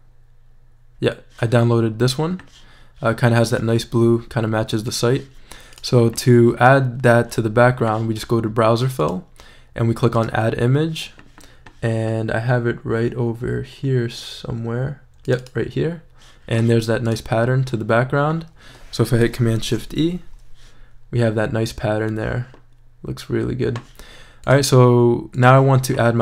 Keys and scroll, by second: 19.6 shift+super+e.